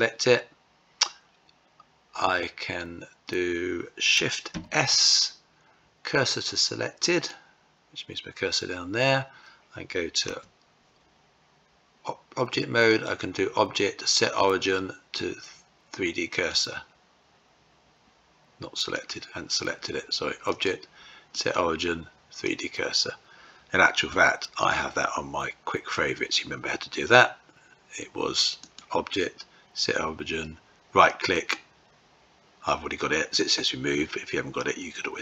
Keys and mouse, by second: 3.9 shift+s, 9.7 Tab, 12.3-16.0 drag, 18.4 click, 19.9-22.1 drag, 23.5 q, 28.1-34.4 drag.